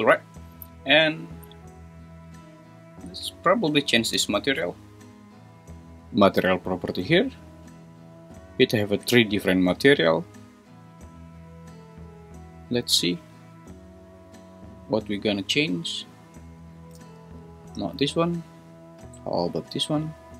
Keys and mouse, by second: 4.1 g, 4.6 Escape.